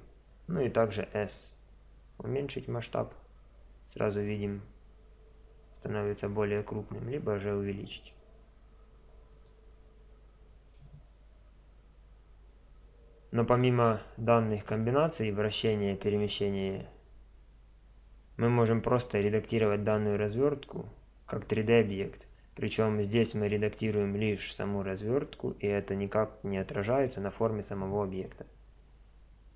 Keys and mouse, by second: 1.3 s, 19.5-25.5 right drag.